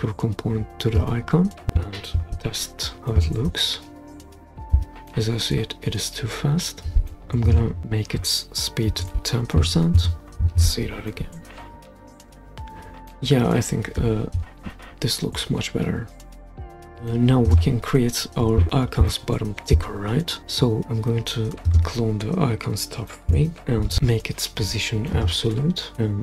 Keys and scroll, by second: 2.1 super+p, 6.8 Escape, 9.6 BackSpace, 10.5 super+p, 23.6 super+d.